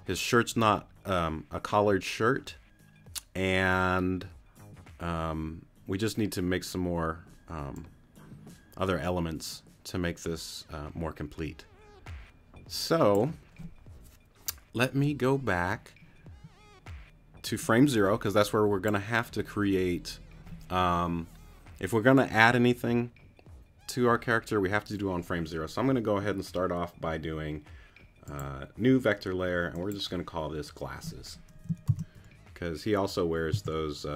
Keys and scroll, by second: 31.9 shift+g, 33.5 l.